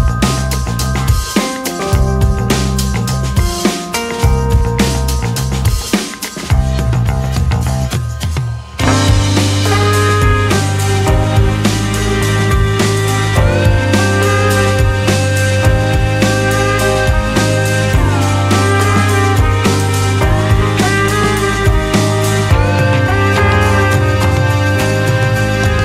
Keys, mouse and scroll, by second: 2.1 click, 3.7-4.8 drag, 6.1-9.1 drag, 10.8-12.3 drag, 12.5 click, 14.4 click, 15.9 click, 20.9-25.8 drag.